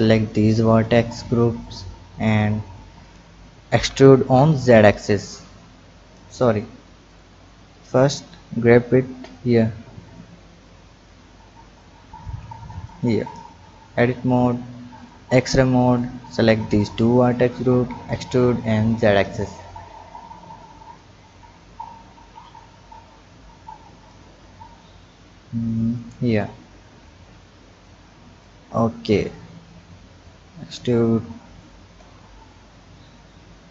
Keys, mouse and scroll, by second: 0.7 shift+click, 3.7 e, 6.3 ctrl+z, 7.1 click, 8.1-10.3 drag, 10.7 click, 11.8-13.5 drag, 13.5 Tab, 14.5 Tab, 14.9 click, 15.9 click, 16.8 shift+click, 17.7 e, 20.0 click, 21.3 drag, 22.5-24.8 drag, 24.8-25.6 scroll down 2, 25.6 click, 26.2-27.3 scroll up 1, 27.3-28.5 drag, 30.2-31.9 drag, 31.9 Tab, 32.5-33.0 scroll down 1, 33.0-33.7 scroll up 2.